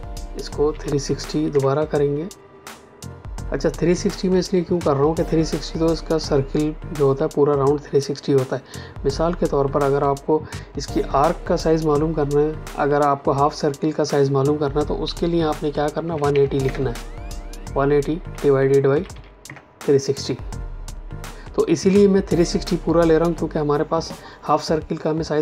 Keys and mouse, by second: 0.6 KP_3, 0.9 KP_6, 1.4 KP_0, 15.0 Escape, 16.0 KP_1, 16.2 KP_8, 18.2 KP_Divide, 18.9 KP_3.